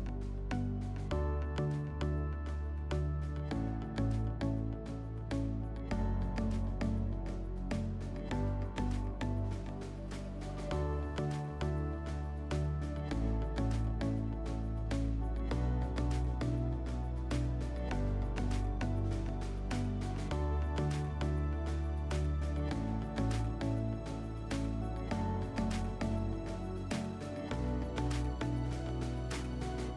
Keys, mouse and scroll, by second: 1.2 click, 7.5 click, 9.4 click, 13.3-15.3 drag, 15.5-22.5 drag.